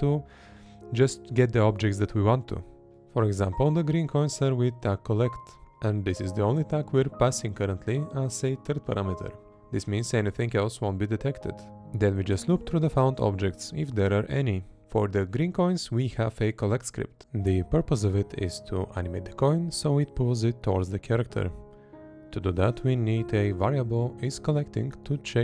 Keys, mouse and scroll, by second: 1.4 Right, 5.1 Up, 5.1 Left, 5.1 Down, 5.1 Right, 6.0 Left, 6.8 Right, 8.8 Right, 11.2 Right, 12.4 Left, 15.4 Left, 17.1 Left, 18.4 Left.